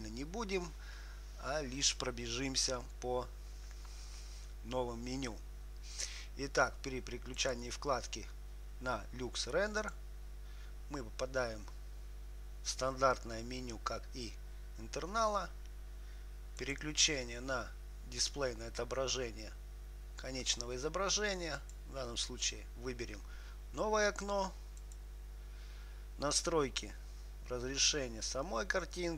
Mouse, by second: 7.6-10.3 drag, 17.0-21.7 drag, 25.1-27.1 drag.